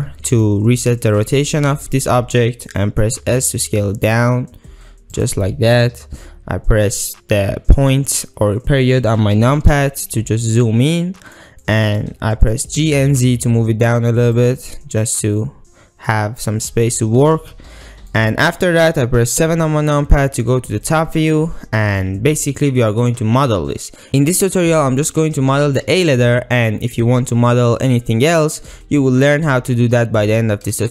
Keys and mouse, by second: 0.4-0.9 middle drag, 1.3-2.1 middle drag, 2.4 middle click, 3.3 s, 5.2 click, 9.7 KP_Decimal, 10.7-11.4 middle drag, 11.7-12.0 middle drag, 12.5 middle click, 12.7 g, 12.9 z, 14.3 click, 14.7-16.1 middle drag, 16.9 middle click, 18.1 middle click, 19.4 KP_7, 21.0-21.3 ctrl+middle drag, 22.0-22.6 ctrl+middle drag.